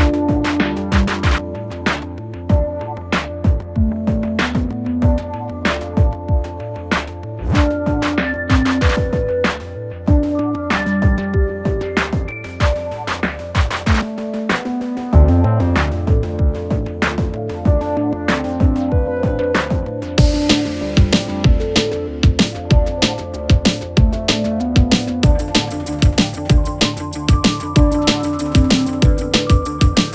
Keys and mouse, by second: 1.6 g, 3.4 s, 5.4-6.7 middle drag, 7.4 s, 8.2-8.6 middle drag, 8.8-9.3 shift+middle drag, 9.8 click, 9.8 middle click, 9.8 right click, 10.2 shift+click, 10.2 shift+middle click, 10.2 shift+right click, 10.5-11.0 drag, 10.5-11.0 middle drag, 10.5-11.0 right drag, 12.7 shift+d, 14.3 s, 17.3 ctrl+a, 18.4 Tab, 19.0 3, 19.3 click, 19.8 shift+middle click, 20.5 shift+middle click, 21.0 middle click, 21.7 ctrl+middle click, 22.4 shift+middle click, 23.4 g, 27.6 shift+middle click, 28.0-29.1 middle drag.